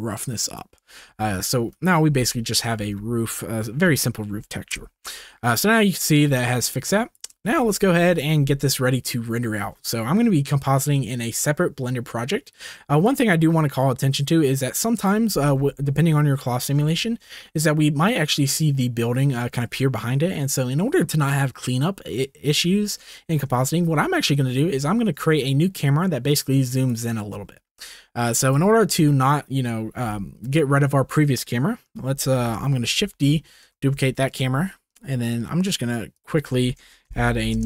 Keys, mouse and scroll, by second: 2.8 ctrl+s, 4.7 KP_0, 6.0-7.2 drag, 7.4 shift+middle click, 8.0 ctrl+s, 12.7 ctrl+s, 13.0-14.3 drag, 15.0 click, 15.2-17.2 middle drag, 23.1 shift+middle drag, 23.5-24.4 middle drag, 24.8 shift+middle drag, 26.3 click, 27.4 shift+middle click, 28.5-30.2 drag, 32.9 shift+d, 33.7 shift+d, 35.3 click, 36.3 click, 36.7 click.